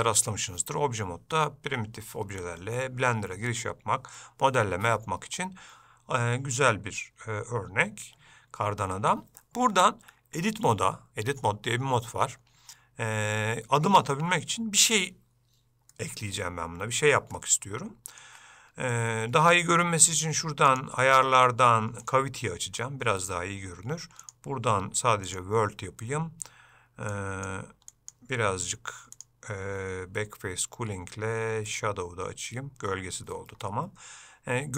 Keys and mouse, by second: 16.2-17.2 middle drag, 17.8 ctrl+middle click, 20.9-33.5 drag, 33.8-34.7 middle drag.